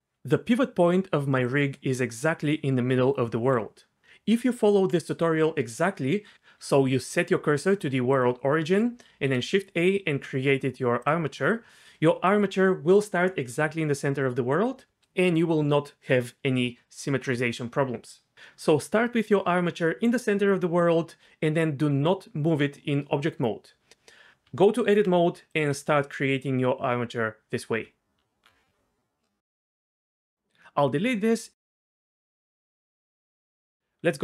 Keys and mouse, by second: 1.2-3.4 d, 3.1 click, 9.1 shift+a, 21.9 g, 23.3 click, 24.3 Tab, 24.4 Tab, 25.8 g, 27.8 Tab, 29.6 x, 34.0 Tab.